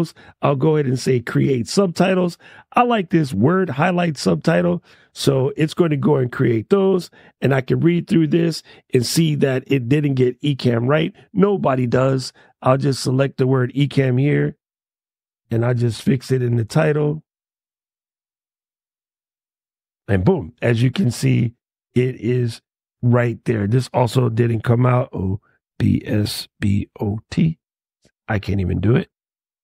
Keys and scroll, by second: 14.2 shift+e, 18.3 shift+e, 24.8-27.0 typing, 28.5-29.6 typing.